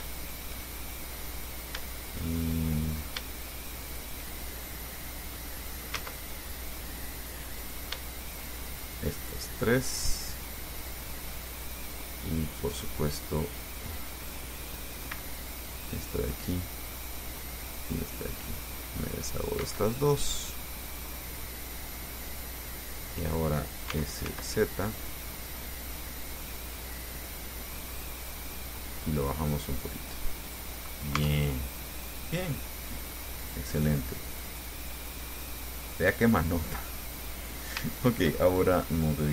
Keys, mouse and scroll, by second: 0.4 shift+right click, 0.9-2.0 shift+middle drag, 2.5 shift+middle click, 4.1 shift+right click, 4.6 shift+middle click, 5.6 middle click, 6.2 ctrl+z, 7.9 click, 8.5 shift+right click, 9.3-11.8 shift+middle drag, 12.9 click, 15.3 c, 15.8 click, 17.9 click, 18.9 middle click, 19.8 Escape, 20.2-20.5 scroll down 1, 20.6-23.7 drag, 24.1 s, 24.5 z, 28.4 click, 29.4-31.0 drag, 31.1 scroll down 1, 31.4 Tab, 31.7 scroll down 2, 32.5-34.4 drag, 35.4-36.5 drag, 36.6-37.7 drag, 37.8-38.6 scroll up 5, 38.1 shift+click, 38.6 shift+click.